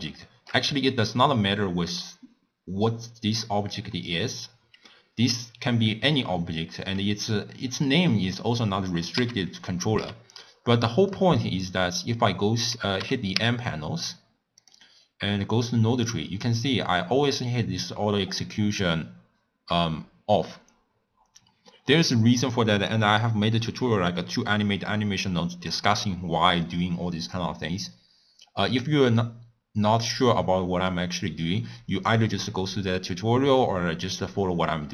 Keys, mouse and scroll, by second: 0.2-3.3 shift+middle drag, 9.1 n, 9.9 n, 11.1-13.0 middle drag, 13.0 n, 13.3 n, 14.6 click, 16.7 click.